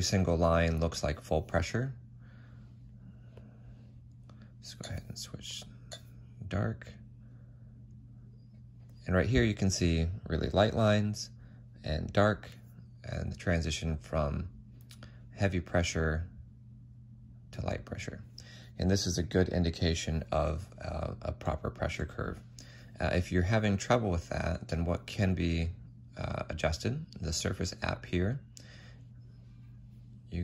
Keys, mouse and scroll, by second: 4.7 f, 5.0 F8, 21.3 ctrl+z, 22.9 ctrl+z, 23.0 ctrl+z.